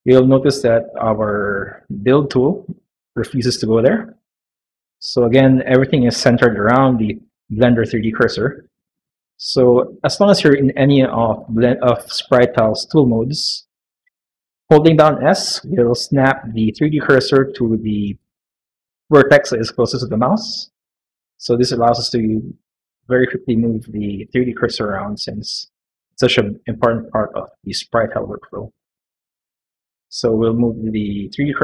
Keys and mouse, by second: 4.6 middle click, 5.5 middle click, 7.7 shift+middle click, 8.8 middle click, 13.9 middle click, 15.0 s, 26.5 middle click, 28.5 middle click, 28.9 middle click, 29.8 s.